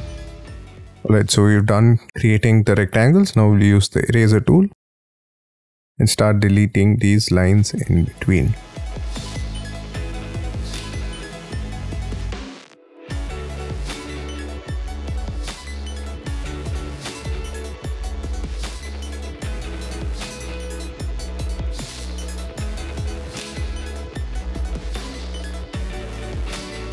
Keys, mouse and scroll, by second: 0.0-2.1 typing, 0.3-0.8 scroll down 9, 2.2-2.7 scroll up 7, 2.7-3.0 scroll down 5, 3.5 scroll up 5, 4.6-6.3 scroll up 17, 4.6 e, 6.3-6.7 scroll down 5, 6.8-7.8 scroll up 11, 7.8-9.8 scroll up 18, 9.8 scroll down 13, 10.6-11.0 scroll down 18, 11.0-11.7 scroll up 5, 11.9 scroll down 7, 12.0-12.6 scroll up 10, 12.8 scroll down 11, 13.0 scroll up 3, 13.8 scroll down 1, 14.0-14.8 scroll up 3, 14.8-15.3 scroll down 18, 15.3-16.0 scroll up 11, 16.2 scroll down 11, 16.4-16.9 scroll up 8, 18.0-18.3 scroll down 19, 18.3-19.2 scroll up 14, 19.2 double click, 20.1-20.4 scroll down 12, 20.4-20.8 scroll up 16, 20.9-21.6 scroll down 23, 21.8-22.2 scroll up 11, 23.4 scroll down 12, 23.8 scroll up 6, 24.7 scroll down 1, 24.8-25.6 scroll up 4, 25.6 scroll down 7, 25.9 scroll up 11, 26.6-26.9 scroll down 19.